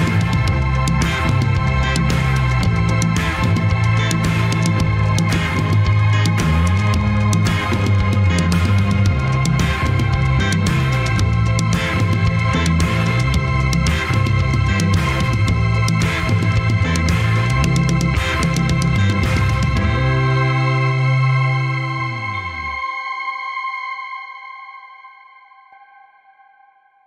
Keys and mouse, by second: 0.0 alt+z, 2.2 ctrl+s, 3.5 click, 3.8 click, 4.4-5.5 middle drag, 6.1 middle click, 6.7 middle click, 9.6 middle click, 11.1-12.1 drag, 12.1 middle click.